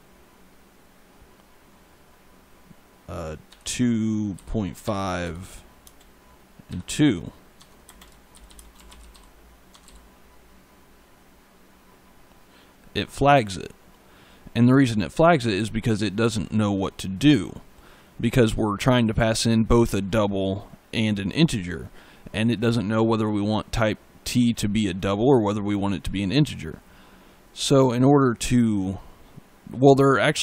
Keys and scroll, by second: 3.3 2, 4.7 5, 5.7 space, 6.5 2, 7.4 Tab, 7.7-9.7 typing, 9.6 Tab.